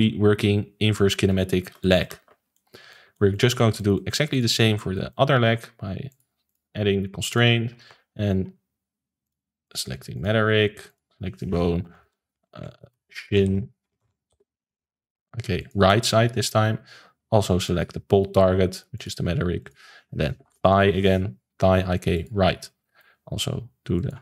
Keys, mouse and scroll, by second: 1.3 alt+g, 1.8-2.2 shift+middle drag, 2.2 ctrl+s, 2.5-4.3 middle drag, 4.3 drag, 4.6-6.0 middle drag, 6.0 click, 6.4-7.8 drag, 7.8 ctrl+s, 9.2 click, 9.6-12.6 drag, 12.6 BackSpace, 14.0 BackSpace, 17.6-22.6 drag, 22.8-23.9 shift+middle drag, 23.9-24.2 drag.